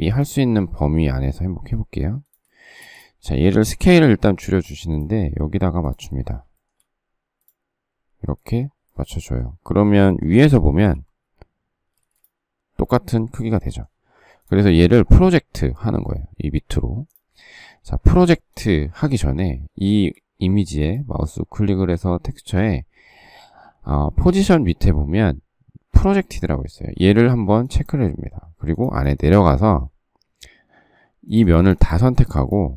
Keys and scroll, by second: 2.8 shift+space, 4.1 s, 10.7 alt+t, 11.9 space.